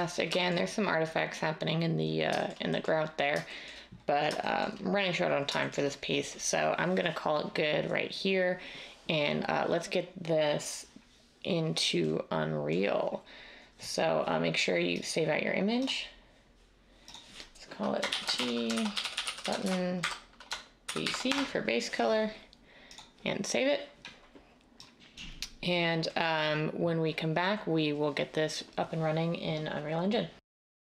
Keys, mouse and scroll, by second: 18.0-21.3 typing.